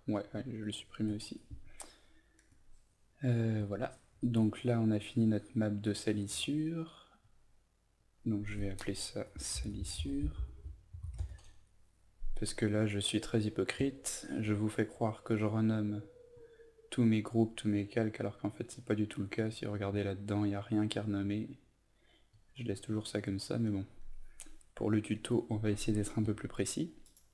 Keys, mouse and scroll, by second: 0.9 Delete, 2.4 click, 9.2-11.5 typing, 13.7 click.